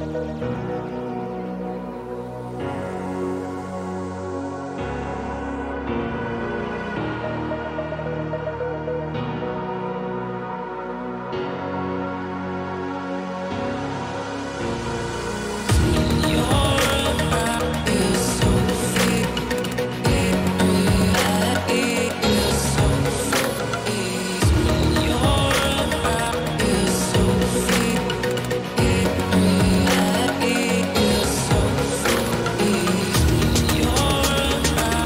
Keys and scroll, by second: 0.1 ctrl+-, 8.6 Return, 16.9 ctrl+t.